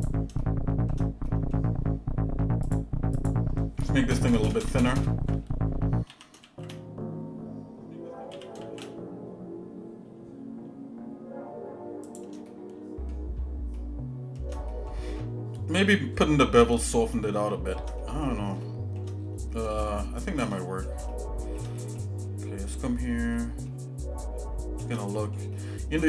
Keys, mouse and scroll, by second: 0.4 shift+middle click, 1.3 middle click, 2.7 click, 3.3 click, 4.1 ctrl+KP_Add, 4.3 ctrl+KP_Add, 4.6 ctrl+KP_Add, 4.8 ctrl+KP_Add, 5.1 ctrl+KP_Add, 6.1 s, 6.4 shift+z, 8.3 s, 12.5 shift+middle click, 13.8 shift+middle click, 14.7 middle click, 15.9 scroll up 1, 16.4 scroll up 1, 16.7 shift+middle click, 17.5 shift+middle click, 18.0 middle click, 18.6 shift+middle click, 19.2-19.7 scroll down 3, 19.8 shift+middle click, 20.6 middle click, 21.1 shift+middle click, 21.8 middle click, 22.2 scroll down 1, 22.7 middle click, 23.7-24.9 shift+middle drag, 25.1 middle click, 25.6 shift+middle click.